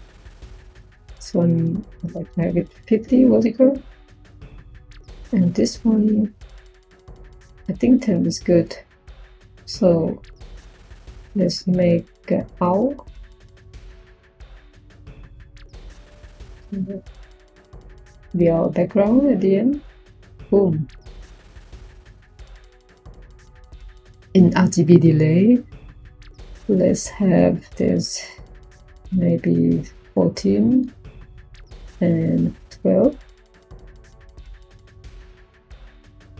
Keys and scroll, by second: 1.8-3.2 typing, 11.9 Tab, 12.6 typing, 29.7 4, 31.9-35.4 typing.